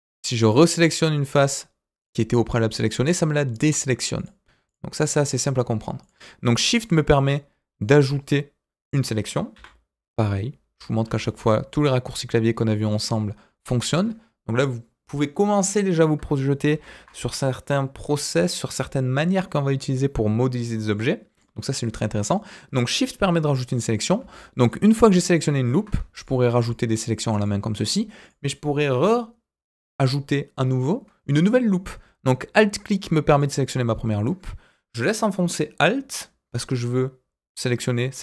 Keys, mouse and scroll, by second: 0.4 shift+click, 1.2 shift+click, 1.9 shift+click, 2.7 shift+click, 3.5 shift+click, 4.1 shift+click, 4.6 shift+click, 5.3 shift+click, 6.0 shift+click, 6.7 shift+click, 7.0 scroll down 2, 7.3-9.3 middle drag, 9.5 g, 13.1 middle click, 16.7 ctrl+z, 20.9 middle click, 21.4-21.9 scroll up 1, 21.9 middle click, 23.7 middle click, 24.6 alt+click, 26.1 shift+click, 26.5 shift+click, 26.9 shift+click, 27.3 shift+click, 28.2 click, 33.3 alt+click.